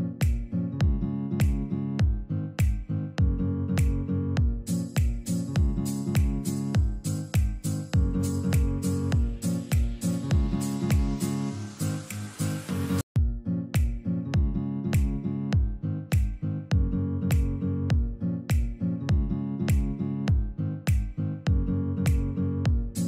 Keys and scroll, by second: 5.1 Escape, 5.3 F2, 17.2 F4.